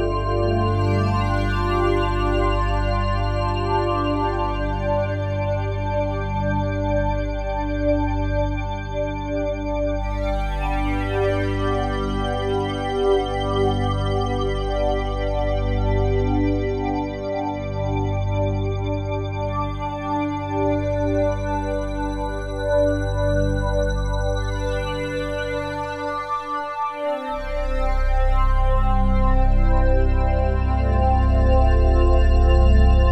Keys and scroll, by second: 14.4 ctrl+z, 28.8 F3.